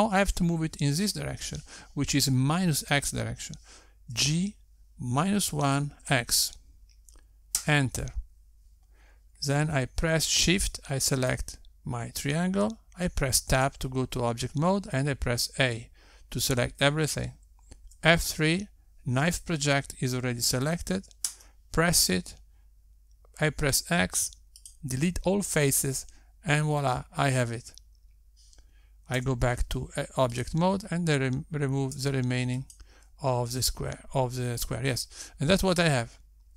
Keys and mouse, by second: 5.7 g, 13.0 shift+click, 15.1 Tab, 17.3 a, 19.4 F3, 25.3 x, 30.8 Tab, 32.3 click, 33.6 x.